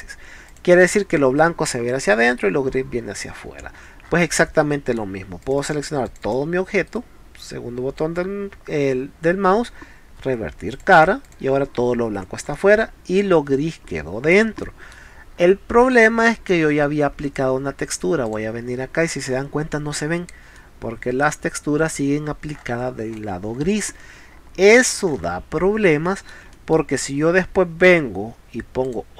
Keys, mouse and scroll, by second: 0.5 click, 3.4 scroll down 1, 4.0 middle drag, 4.6-4.9 middle drag, 5.4 click, 5.6 click, 6.1 click, 6.2 click, 6.9-10.7 right drag, 10.7 click, 11.3 click, 12.5 middle click, 13.5 middle click, 14.6 middle click, 15.8 scroll up 2, 16.3 middle click, 18.3 click, 20.6 middle click, 21.6 middle click, 22.3 scroll down 1, 22.5 scroll up 1, 23.2 middle click, 23.3-23.8 scroll up 3, 24.5-24.8 scroll down 4, 25.1 scroll up 2, 25.2 middle click, 26.1 middle click, 26.6 middle click, 28.9 click.